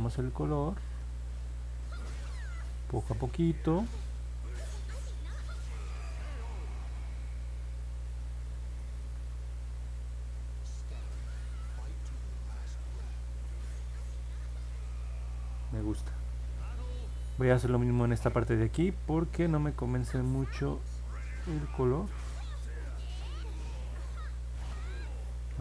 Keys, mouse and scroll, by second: 1.1 click, 1.6 click, 2.0 click, 2.4 click, 2.9 click, 3.3 click, 3.8 click, 4.3 click, 4.7 click, 5.1 click, 5.5 click, 5.9 click, 6.4 click, 6.8 click, 7.2 click, 7.6 click, 10.2 click, 10.9 click, 11.3 click, 11.7 click, 12.3 click, 12.8 click, 21.5-24.6 drag.